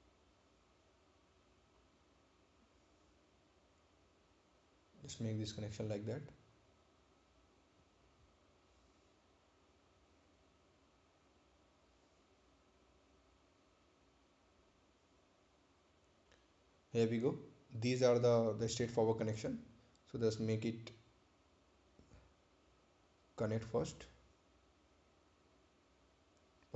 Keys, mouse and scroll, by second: 3.3 click, 5.6 click, 8.0 right click, 9.9 scroll down 1, 10.8 scroll up 1, 13.5 scroll down 1, 16.9 scroll down 1, 16.9 ctrl+click, 17.9 ctrl+click, 21.1 ctrl+click, 23.7 ctrl+click.